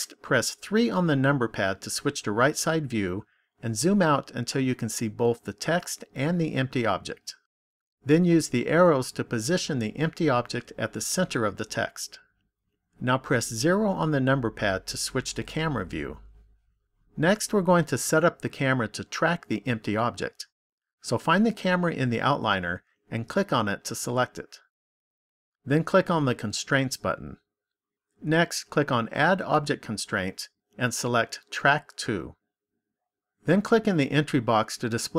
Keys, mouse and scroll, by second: 0.6 KP_3, 3.0-3.8 scroll down 2, 4.0 scroll down 1, 8.4 click, 13.3 KP_0, 20.7 click, 23.0 click, 26.8 click, 29.0 click, 34.8 click.